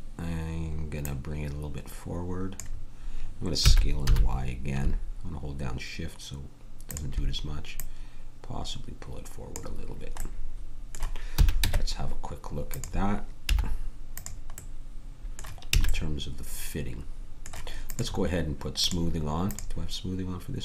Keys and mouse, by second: 1.0-3.6 drag, 3.6 s, 7.7-9.0 drag, 11.3 a, 11.6 Tab, 13.5 z, 15.8 a.